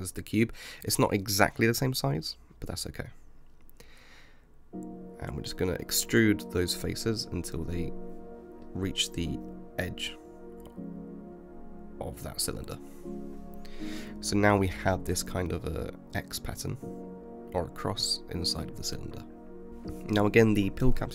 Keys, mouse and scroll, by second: 0.7 KP_7, 1.4-3.2 scroll down 6, 3.2 click, 4.5 e, 8.4-10.2 middle drag, 10.2 click, 11.1 KP_7, 12.1 e, 14.3-16.5 middle drag, 16.5-17.1 scroll up 2, 17.1 scroll up 1, 17.3 Tab, 18.0-19.7 middle drag, 19.7 click, 20.7 s.